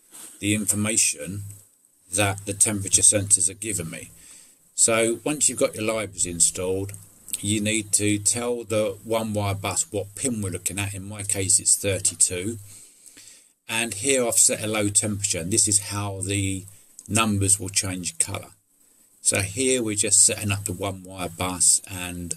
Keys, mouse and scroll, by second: 6.1 middle click, 6.9 middle click, 18.3 middle click.